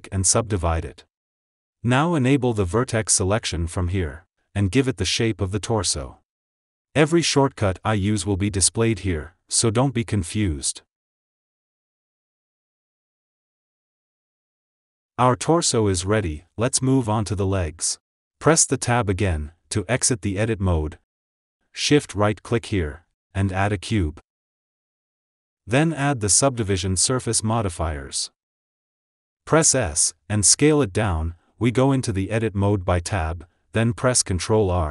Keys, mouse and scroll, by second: 1.4 click, 2.8 click, 3.3 shift+click, 4.7 g, 6.4 s, 8.2 click, 9.2 shift+click, 10.2 g, 12.0 s, 14.4 click, 15.0 s, 19.6 Tab, 21.3 shift+middle click, 21.4-21.9 scroll up 1, 21.9 shift+right click, 23.5 shift+a, 27.5-29.5 drag, 29.5 Tab, 29.8 s, 30.5 g, 33.2 Tab.